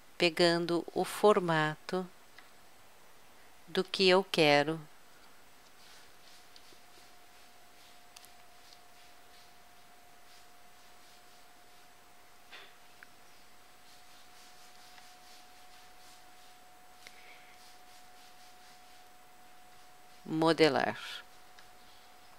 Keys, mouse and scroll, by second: 1.2 middle click, 3.1-4.3 middle drag, 6.5-8.3 drag, 8.3 middle click, 8.5-10.2 drag, 10.2 middle click, 10.6-12.3 drag, 12.3 middle click, 12.5-14.3 drag, 14.3 middle click, 19.0-20.8 middle drag, 21.3-22.3 middle drag.